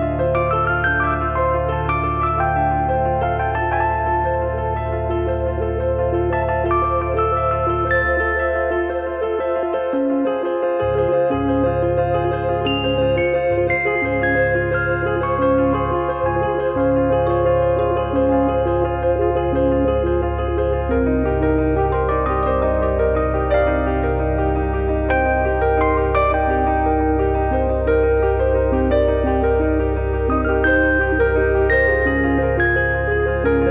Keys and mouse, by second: 1.0 click, 2.5 click, 3.6 click, 4.1 f, 4.3 click, 11.5 click, 12.2 click, 15.8 click, 18.5 click, 19.3 click, 19.7 z, 19.8 click, 20.3 click, 22.5 click, 24.6 f, 24.9 click, 26.6 click, 27.8 click, 28.4 middle click, 28.8 click, 29.8 click, 30.4 middle click, 30.9 click, 31.3 e, 31.7 click, 32.0 click, 32.5 f, 32.7 middle click, 33.0 KP_3, 33.5 shift+middle click.